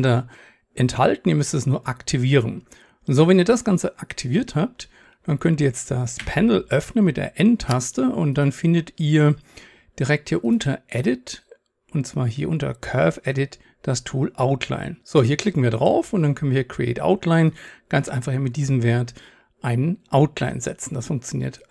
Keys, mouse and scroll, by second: 6.2 n, 8.4-15.2 middle drag, 19.4-21.7 drag.